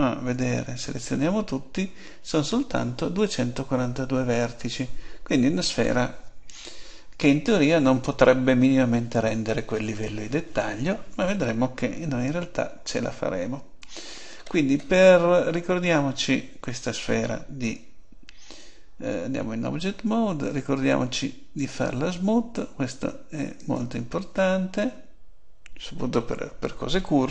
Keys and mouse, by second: 0.3 a, 0.6 a, 12.2 Tab, 15.5 middle click, 19.2 Tab, 20.4-22.3 drag, 23.6-25.5 drag.